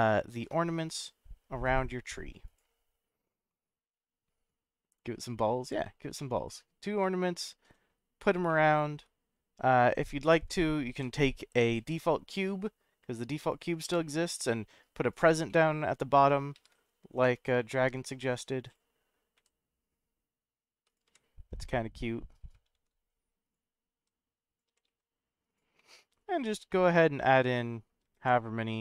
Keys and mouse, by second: 0.3 shift+z, 2.4 click, 3.5-5.2 middle drag, 6.2 middle click, 7.0-7.9 middle drag, 8.5-9.0 middle drag, 10.9 shift+d, 12.5 z, 13.5 click, 13.8 g, 15.1 click, 15.5 middle drag, 16.5 shift+a, 19.4 s, 20.9 click, 21.0 g, 22.7 shift+z, 23.4 click, 24.0 s, 24.5 click, 24.6 g, 24.9 z, 25.5 click, 25.7 middle click, 27.5 middle click, 28.0 shift+d.